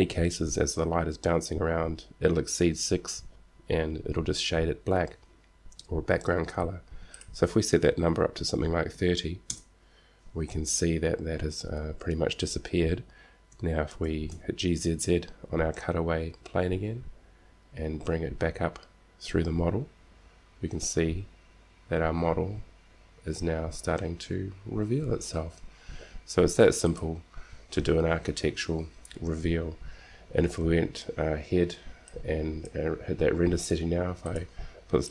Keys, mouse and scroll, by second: 7.4-9.4 drag, 13.0 click, 14.2 g, 27.8-29.1 drag, 32.3-34.2 drag, 34.4-35.1 drag.